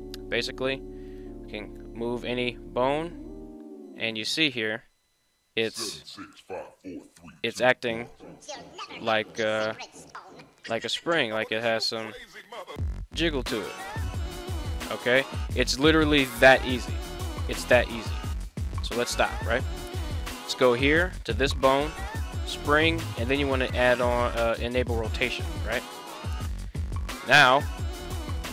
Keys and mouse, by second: 1.4 right click, 2.6 g, 5.7 click, 8.2 right click, 9.2 right click, 9.8 g, 14.8 right click, 16.5 alt+g, 18.5 click, 22.3 click, 22.7 click.